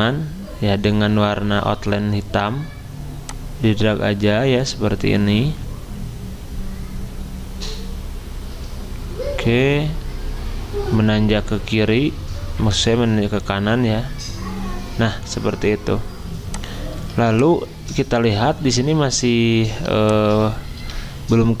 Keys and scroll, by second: 17.0 z, 19.9 v.